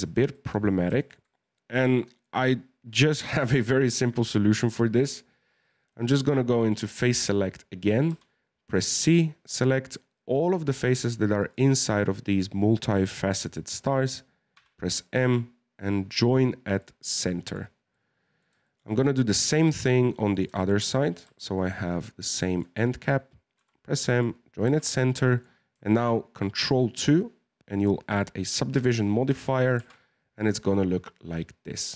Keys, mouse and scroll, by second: 4.0-4.6 scroll up 1, 4.6 right click, 6.5 click, 8.1 c, 14.5 m, 16.8 middle click, 17.5-17.9 scroll down 2, 17.9-19.3 middle drag, 19.3-20.3 scroll up 2, 20.3 right click, 20.5-21.2 scroll up 2, 20.5 shift+middle click, 21.2 c, 23.5 m, 24.6 Tab, 25.0 scroll down 1, 25.1-28.2 middle drag, 30.0 ctrl+2, 30.7-31.9 middle drag.